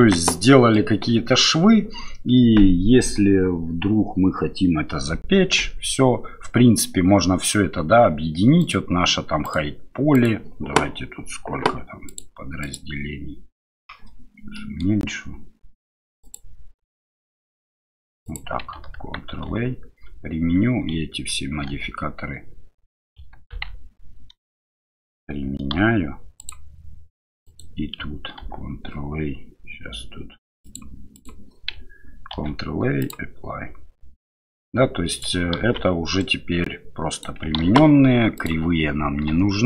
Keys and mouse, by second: 0.0 Tab, 0.4-0.8 middle drag, 8.6 click, 9.4 click, 10.1 click, 12.1 right click, 12.6 click, 14.6 middle click, 16.3 click, 18.3 click, 19.5 ctrl+a, 21.7 ctrl+a, 23.5 ctrl+z, 24.5 shift+click, 25.7 ctrl+a, 27.4 click, 28.4 ctrl+a, 32.3 ctrl+a, 34.2-35.2 drag, 35.6 ctrl+z, 36.2-37.2 drag, 38.4 click, 39.3 Delete.